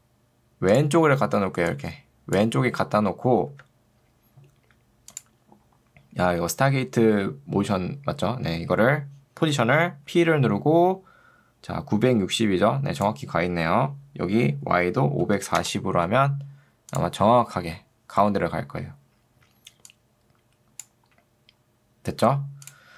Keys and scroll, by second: 1.4 ctrl+2, 10.2 p, 15.0-15.9 typing.